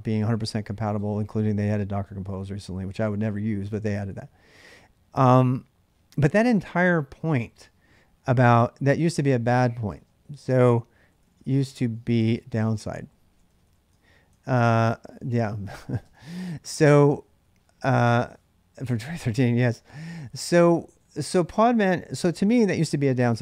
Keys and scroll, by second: 9.5-16.4 typing.